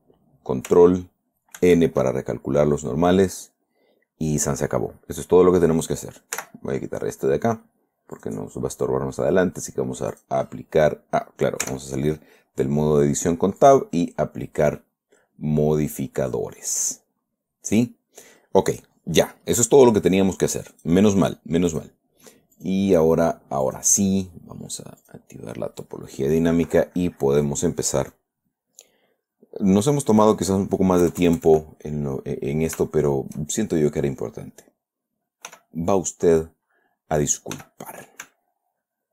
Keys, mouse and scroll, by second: 2.0 ctrl+n, 6.8 n, 8.5 click, 10.5 click, 12.0 Tab, 14.0 click, 14.6 scroll down 1, 15.2-17.2 middle drag, 17.9 scroll up 1, 21.1 click, 22.1 click, 23.0 click, 24.0 click, 25.4 click, 29.5 scroll down 1, 30.1 click, 31.4 KP_Add, 32.2 click, 33.3 shift+middle click, 34.0 shift+middle click, 35.0 middle click, 35.9 f, 36.7 click, 37.1 middle click, 37.9 f, 38.2 click, 38.8-39.1 ctrl+drag.